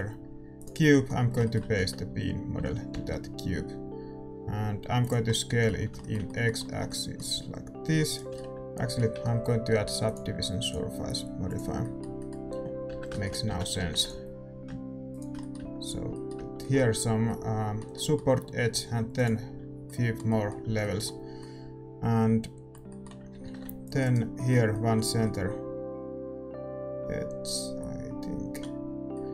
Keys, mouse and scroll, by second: 0.6 shift+a, 0.8-5.0 middle drag, 1.7 Tab, 2.6 s, 5.2-11.5 middle drag, 8.0 right click, 8.0 a, 8.4 Tab, 11.5-12.8 drag, 11.8 middle click, 12.8 Tab, 13.1 middle click, 13.4 a, 13.8 ctrl+r, 15.5 Tab, 16.6 Tab, 19.2-23.4 drag, 19.2-23.4 middle drag, 23.4 ctrl+r.